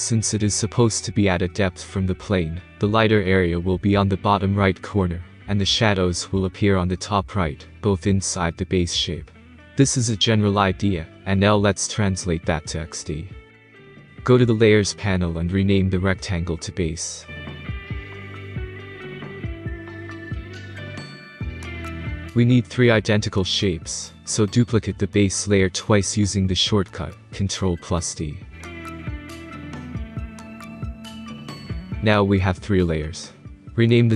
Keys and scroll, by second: 20.8-22.3 typing, 29.3 ctrl+d, 31.2 ctrl+d.